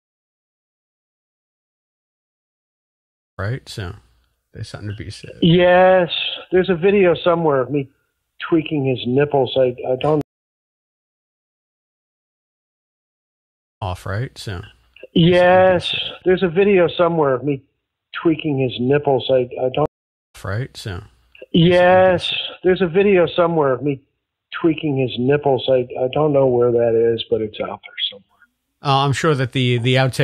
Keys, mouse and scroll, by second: 0.3-2.2 drag, 2.6 click, 3.2 click, 3.3 space, 9.1-10.2 drag, 10.1 space, 10.8 Delete, 11.2 click, 12.3 click, 13.6 click, 13.7 space, 15.4 click, 15.9 click, 16.7 click, 17.4-19.2 drag, 19.4 click, 19.8 space, 20.2 click, 20.2 space, 23.0-24.7 drag, 25.0 click, 25.8 ctrl+s, 27.1 click, 28.2 click, 28.9 click, 29.6-30.2 drag.